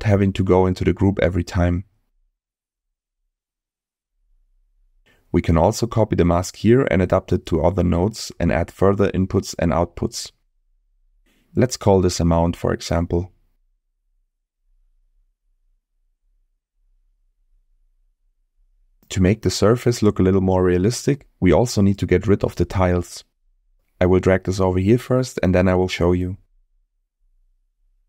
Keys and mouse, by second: 0.7-1.9 drag, 2.7 click, 3.9 middle click, 4.5 middle click, 7.0 middle click, 11.6-12.9 shift+drag, 18.5 middle click, 19.8-21.1 middle drag, 23.8-24.3 drag, 25.4 click, 26.8 click, 27.7-28.0 drag.